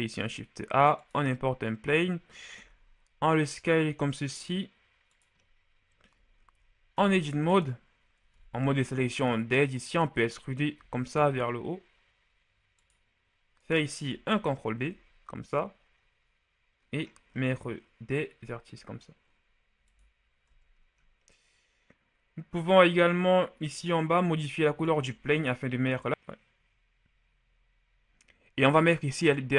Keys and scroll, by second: 2.6 s, 6.8 ctrl+Tab, 8.3 ctrl+Tab, 10.6 e, 10.8 z, 14.6 ctrl+b, 20.3 Tab.